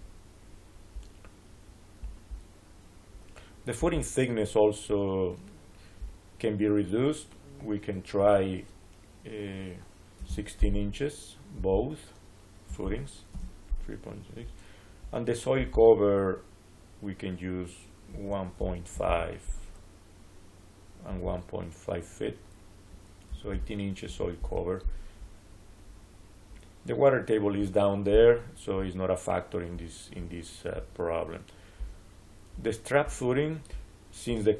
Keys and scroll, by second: 10.1 1, 11.3 6, 12.3-13.2 typing, 18.0 1, 18.5 ., 18.8 5, 18.9 Return, 22.9-23.9 typing, 24.3 Return.